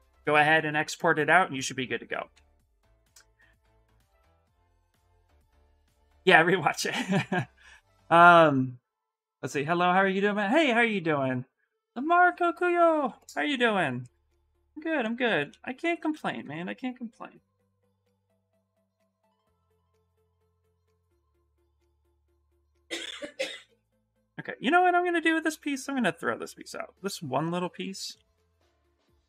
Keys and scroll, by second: 15.2-16.7 typing, 22.2 q, 28.1 shift+f, 28.5 shift+f.